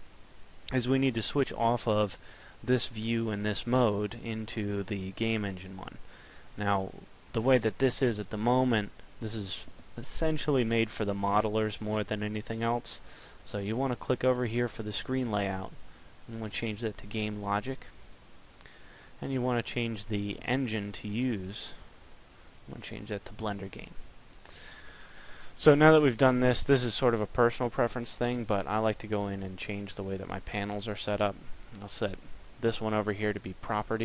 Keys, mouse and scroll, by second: 15.3 click.